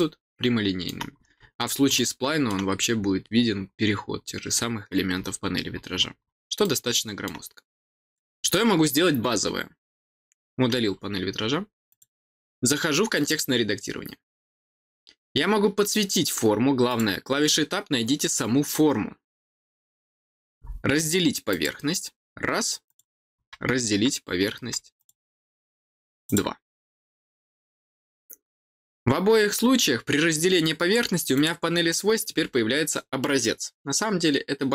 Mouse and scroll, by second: 1.1 middle click, 1.1 scroll up 2, 1.9 middle click, 2.7 scroll down 1, 3.3-3.6 scroll down 2, 4.1-6.0 scroll down 11, 6.6 middle click, 8.0-11.9 drag, 13.1 click, 16.8 click, 21.4 click, 22.8 click, 24.9 click, 26.2 click, 31.3 click.